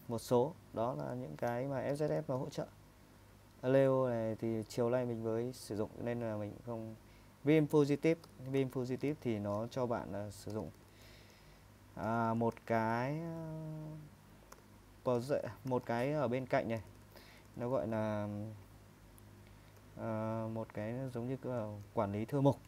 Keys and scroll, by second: 1.0-2.8 typing, 4.5-5.2 typing, 8.3-13.4 typing, 14.5-18.0 typing, 19.5-20.3 typing, 21.8-22.5 typing.